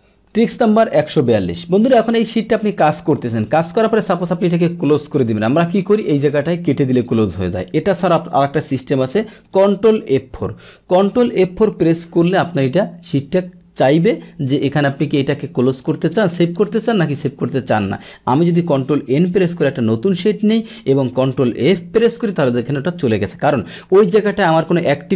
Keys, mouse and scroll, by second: 0.0 click, 10.0 ctrl+F4, 10.4 ctrl+F4, 17.8 click, 18.7 click, 19.1 ctrl+n, 21.8 ctrl+F4.